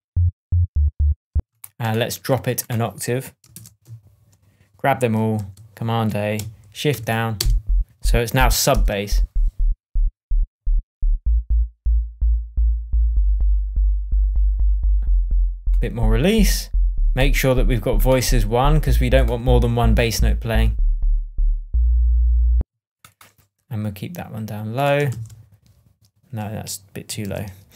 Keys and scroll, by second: 1.2 space, 1.8 space, 3.5 alt+a, 5.3 shift+super+a, 6.3 shift+super+a, 6.8 shift+Down, 7.3 shift+space, 8.1 space, 8.7 shift+Tab, 22.5 space, 25.0 shift+Down, 27.2 super+z.